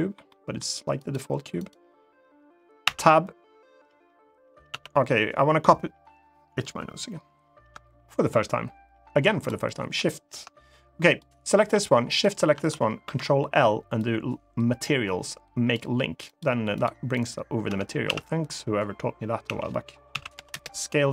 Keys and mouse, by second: 0.0 middle drag, 2.6 Tab, 9.1 shift+click, 11.8 shift+click, 12.8 ctrl+l, 16.0 click, 16.5 click, 17.4 Tab, 17.8 a, 19.2 a, 19.8 s, 20.1 0, 20.2 Return.